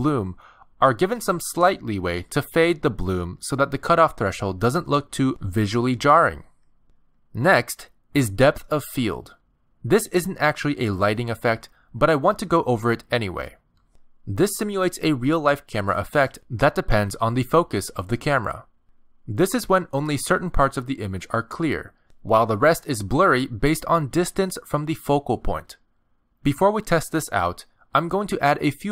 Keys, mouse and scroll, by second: 0.9 click, 2.6 click, 3.5 scroll up 4, 5.3 click, 8.9 click, 9.9 click, 10.8 click, 15.9-16.8 scroll down 3, 16.8 middle click, 20.2-20.5 scroll down 1, 20.5 middle click, 26.5-28.9 typing, 27.2 right click.